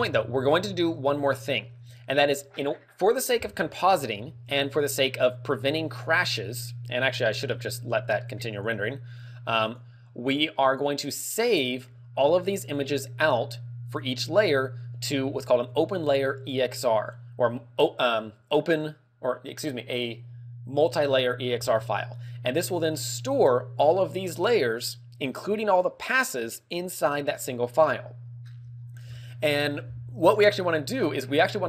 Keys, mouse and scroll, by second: 0.1 Escape, 0.9-1.3 scroll up 3, 1.6 middle click, 8.6 click, 9.7 click, 10.7 click, 13.9 click.